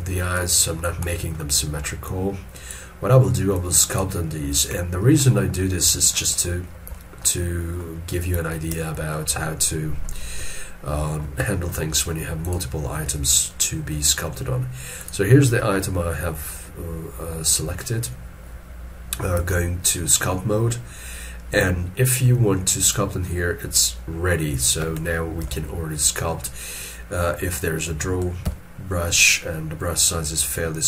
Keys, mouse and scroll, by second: 5.4 scroll down 1, 7.4 middle click, 9.4 ctrl+middle click, 10.4 ctrl+middle click, 11.5 shift+middle click, 25.4 ctrl+z, 28.4 x.